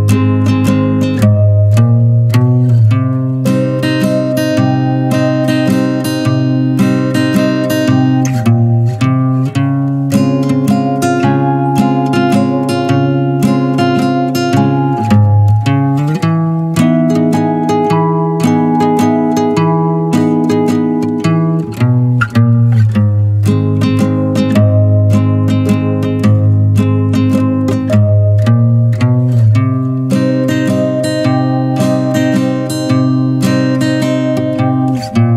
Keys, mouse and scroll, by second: 1.4 middle click, 2.3 Tab, 2.6 Tab, 3.3 2, 3.5 click, 4.1 alt+shift+click, 4.9 ctrl+b, 6.4 middle drag, 6.6 scroll up 1, 6.9-7.9 shift+middle drag, 7.9 ctrl+r, 8.7 middle click, 9.2 s, 13.4 scroll down 1, 13.5 Tab, 13.8-14.4 middle drag, 14.4 Tab, 15.0 3, 15.2 click, 15.6-16.9 middle drag, 16.9 s, 17.9-19.0 middle drag, 19.0 e, 20.6-22.0 middle drag, 22.0-23.2 scroll up 1, 23.2 ctrl+b, 25.0 click, 25.3 scroll down 3, 25.5-26.9 middle drag, 26.9 scroll up 2, 27.2-29.2 shift+middle drag, 29.2 n, 30.6 click, 31.0 click, 31.6 middle click, 32.2 click, 32.5-34.1 middle drag, 35.2 middle click.